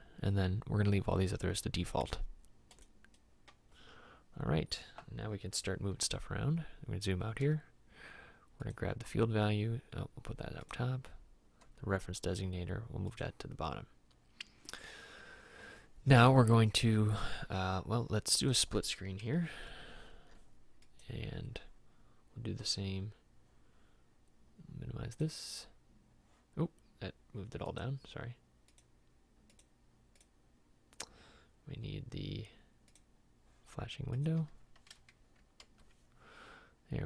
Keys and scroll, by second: 7.6 m, 11.8 m.